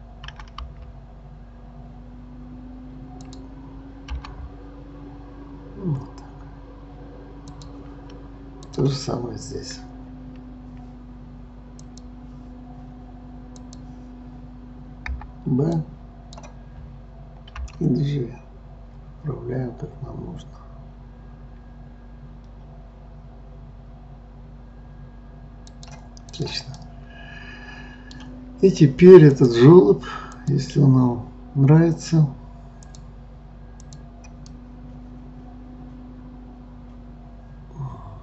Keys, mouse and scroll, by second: 0.3 g, 4.1 g, 8.7 click, 11.8-15.1 drag, 15.1 b, 17.6 g, 26.3 click, 26.7-29.3 middle drag, 29.3 click, 30.4 click, 32.9 click, 33.8 click, 34.5-37.5 middle drag.